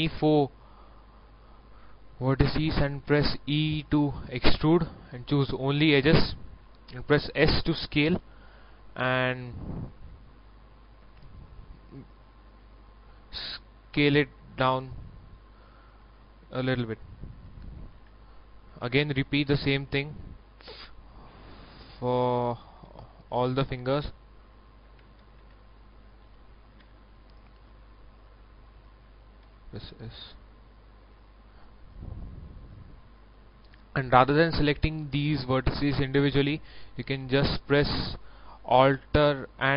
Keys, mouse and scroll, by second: 3.0 e, 5.5 click, 7.2 s, 12.7 click, 13.6 shift+middle click, 14.4 scroll up 1, 15.2 shift+right click, 15.7 shift+right click, 16.1 shift+right click, 16.6 shift+right click, 17.9 shift+e, 18.3 click, 21.2 shift+middle click, 22.0 shift+right click, 22.7 shift+right click, 23.1 shift+right click, 25.1 ctrl+z, 25.9 shift+right click, 26.7 shift+e, 28.3-29.3 drag, 29.4 s, 30.4 click, 30.9 middle click, 33.1 shift+middle click, 34.8 right click, 35.8 shift+right click, 36.3 shift+right click, 36.7 middle click, 36.8-38.6 scroll up 2, 38.7 scroll up 1.